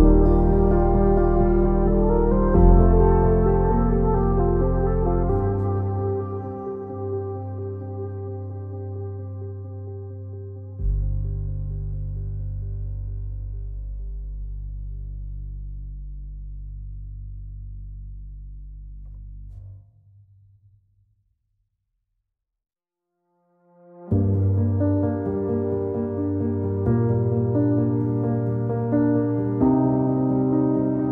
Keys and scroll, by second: 12.6 ctrl+z, 16.9 ctrl+z, 20.0 alt+x, 25.6 Delete.